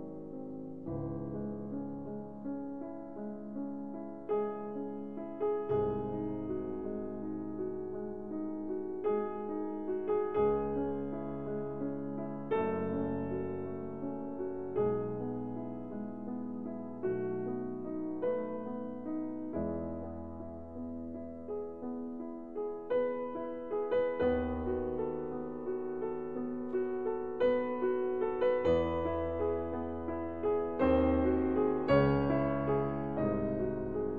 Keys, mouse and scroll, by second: 1.7 alt+m, 3.9-5.6 middle drag, 8.7-10.5 drag, 9.5 s, 15.6-19.3 drag, 18.4 s, 22.0-23.8 middle drag, 28.5-30.5 middle drag, 32.1 Tab, 33.7-34.1 middle drag.